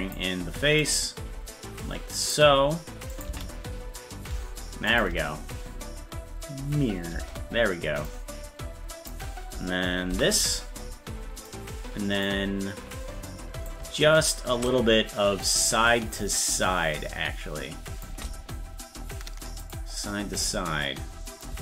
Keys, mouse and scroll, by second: 0.8-2.3 drag, 3.2 click, 3.3 space, 4.9 click, 5.1 space, 8.1-9.1 drag, 10.1 i, 11.5 click, 13.7 click, 15.4-18.1 drag, 19.6 click, 21.4-21.6 drag.